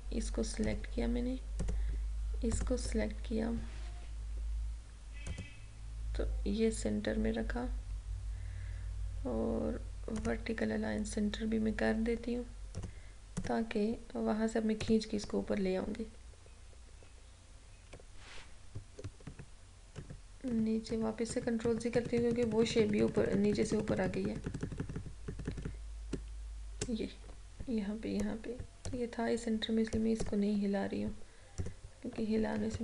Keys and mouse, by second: 10.3 click, 12.9 click, 15.7 Up, 19.4 ctrl+z, 29.0 click, 32.7 ctrl+-.